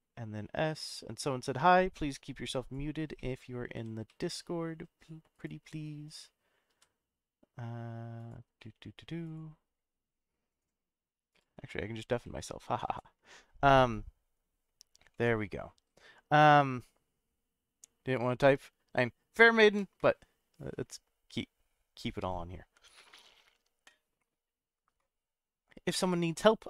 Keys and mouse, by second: 2.6 click, 3.2 middle click, 3.7 s, 4.1 z, 5.3 right click, 6.7 s, 8.2 click, 8.6-9.0 middle drag, 15.1-16.8 middle drag.